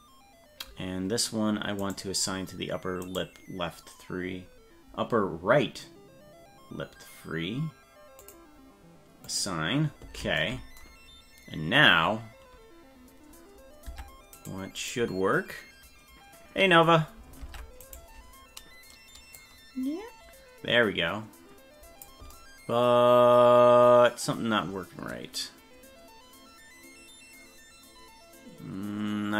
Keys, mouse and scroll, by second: 1.8 right click, 3.2 right click, 8.3 click, 9.3 click, 13.9 Tab, 14.4 right click, 17.4 ctrl+Tab, 17.9 right click, 19.4-22.1 drag.